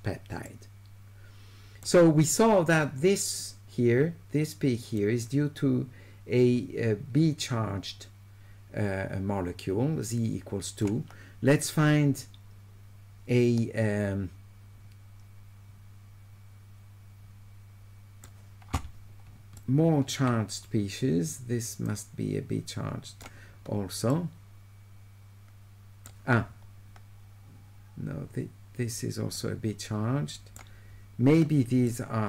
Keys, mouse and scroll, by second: 0.5 right click, 4.9-10.8 drag, 11.6-18.2 right drag, 19.6 shift+right click, 21.9-23.2 drag, 24.1-26.1 right drag, 29.4 right click, 30.5 middle click, 31.9 shift+middle click.